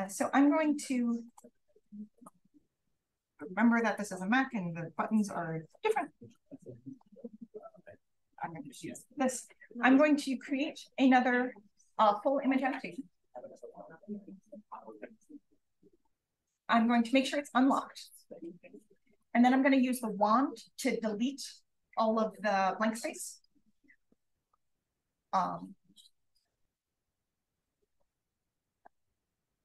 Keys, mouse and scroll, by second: 3.3 d, 5.6 shift+super+s, 6.3 click, 7.4 shift+super+a, 7.5 click, 14.8 click, 19.1 click, 20.0 w, 26.7-28.1 alt+drag, 28.9 click.